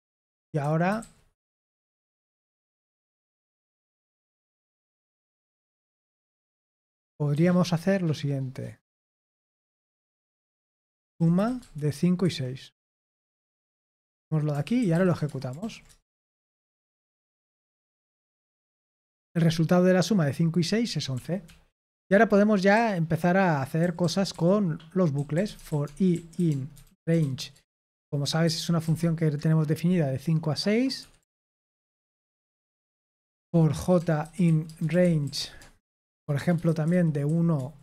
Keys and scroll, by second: 0.0-1.9 typing, 2.5 Escape, 3.1-5.1 typing, 6.6-7.3 typing, 9.6-15.6 typing, 15.8 Return, 16.6-17.8 typing, 18.3 Return, 21.1 ctrl+p, 21.4 ctrl+p, 21.9 Return, 23.1-28.9 typing, 30.1-37.8 typing, 30.9 Escape, 32.7 Tab.